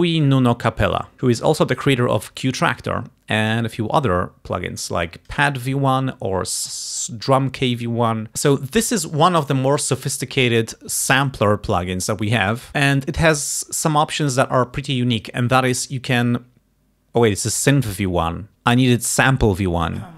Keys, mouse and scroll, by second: 1.2 click, 4.8 click.